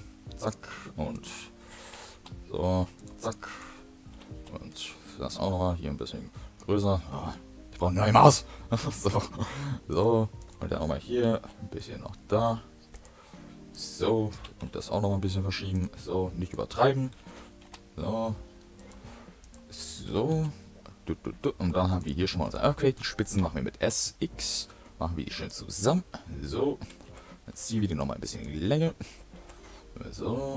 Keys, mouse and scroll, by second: 1.0 click, 1.7 g, 2.9 typing, 3.4 click, 4.0 g, 10.3 click, 11.1 g, 13.6 click, 14.3 g, 16.3 click, 17.0 g, 19.3 click, 20.0 g, 22.3 click, 22.7 shift+middle click, 23.3 s, 26.7 g, 28.2 click, 29.0 s.